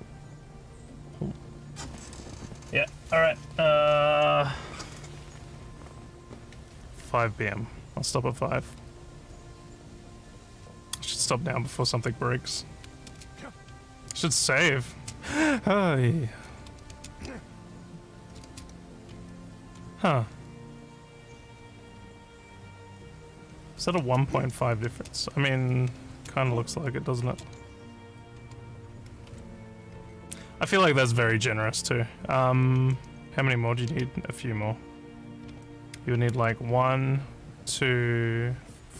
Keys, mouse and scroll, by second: 12.6-17.1 typing, 18.1-21.2 typing, 22.8-24.2 typing, 25.2 a, 25.8 a, 26.1 space, 27.2 space, 27.4 d, 27.7 a, 28.3 s, 32.5-36.9 typing, 38.1 a.